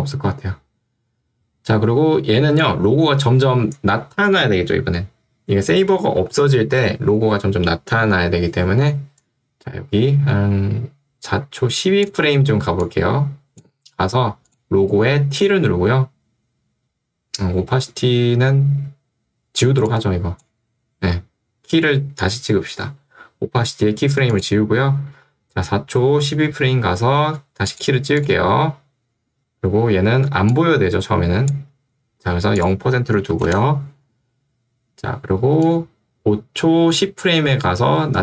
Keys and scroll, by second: 12.6 ctrl+2, 14.0 Escape, 15.4 t, 33.5 Return.